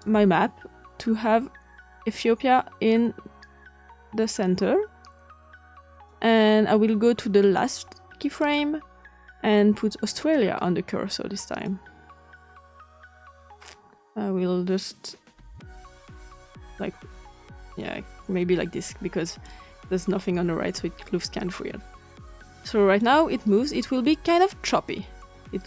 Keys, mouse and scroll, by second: 7.4 click, 8.3 click, 11.6-19.4 drag, 22.4 click, 23.9 click.